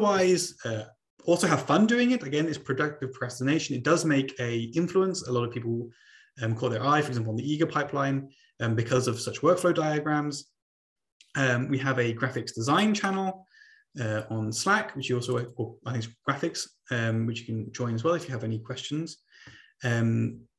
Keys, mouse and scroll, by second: 14.6 click, 15.6 click.